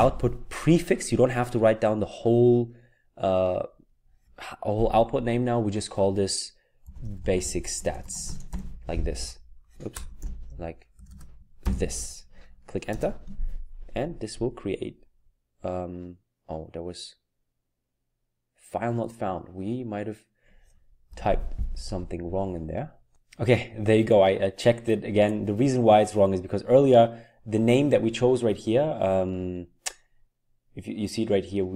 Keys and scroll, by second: 6.6-11.6 typing, 12.8 typing, 21.1 Up.